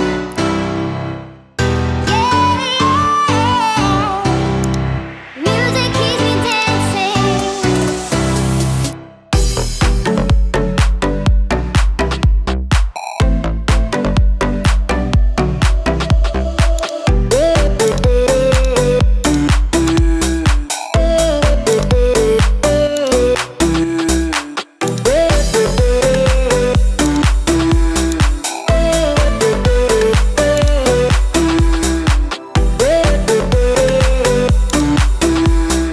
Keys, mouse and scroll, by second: 0.7 Home, 2.5 shift+s, 3.0 shift+a, 5.4 s, 8.7 q, 16.8 click, 17.9-18.7 drag, 19.3-20.0 drag, 23.0 click, 24.9 click, 28.1 click, 30.6 click, 33.1 s.